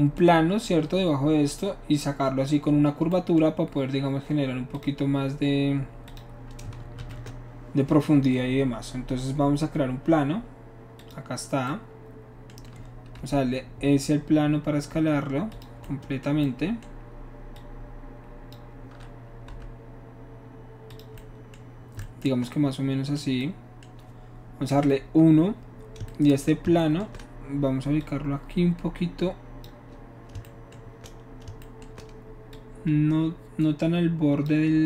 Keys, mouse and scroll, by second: 4.7 click, 6.0 click, 6.9 shift+a, 11.0 click, 13.3 s, 15.6 click, 17.6 click, 19.7 s, 20.9 click, 24.8 KP_1, 28.0-29.7 shift+drag, 32.6-34.5 shift+drag.